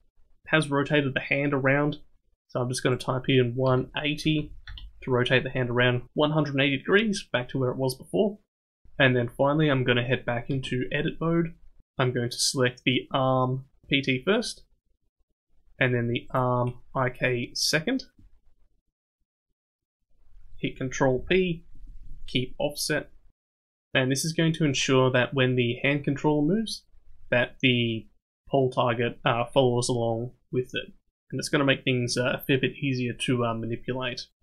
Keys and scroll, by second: 10.5 Tab, 21.1 ctrl+p.